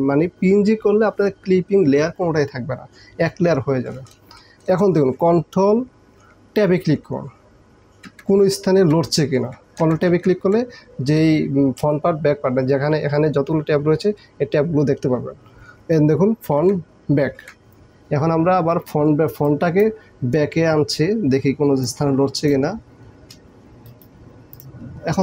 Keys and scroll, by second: 8.2 ctrl+Tab, 9.9 ctrl+Tab, 10.5 ctrl+Tab, 16.6 ctrl+Tab.